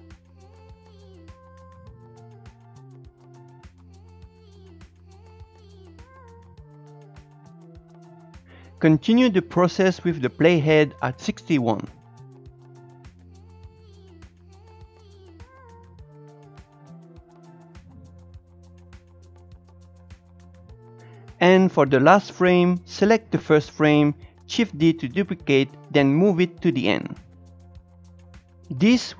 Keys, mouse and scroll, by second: 0.2-5.5 drag, 5.5 shift+middle click, 5.6-8.1 drag, 8.1 shift+middle click, 8.6 click, 10.6-11.5 scroll down 1, 11.5-12.0 scroll up 2, 12.0-13.8 drag, 13.8 shift+middle click, 13.9 scroll up 1, 14.0-17.8 drag, 17.8 shift+middle click, 17.9 shift+click, 18.5 shift+middle click, 18.6-19.7 shift+drag, 19.7 scroll down 2, 19.8 shift+click, 20.1 shift+middle click, 20.2 scroll up 2, 20.3 click, 20.5-22.6 scroll down 1, 22.6 click, 25.6 shift+d.